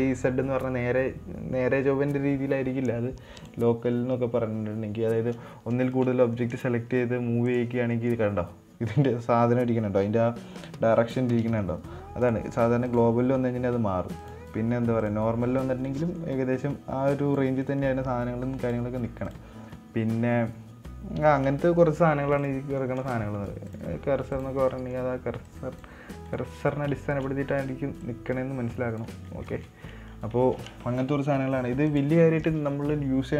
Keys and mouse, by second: 3.8-5.3 drag, 6.3 shift+right drag, 6.7 middle click, 8.3 middle click, 11.5 shift+middle drag, 11.8 middle click, 12.6-13.7 drag, 14.7-15.8 drag, 16.2-16.5 middle drag, 17.0 click, 18.0 middle drag, 19.0 drag, 19.7-22.6 drag, 23.2 middle drag, 24.2-24.9 drag, 25.2 middle click, 25.8-26.2 drag, 26.6 right click, 27.0 right click, 27.4 shift+right click, 28.4-29.4 drag, 29.6 middle drag, 29.9 ctrl+z, 30.3 middle drag, 30.7 middle drag, 32.3-33.3 drag.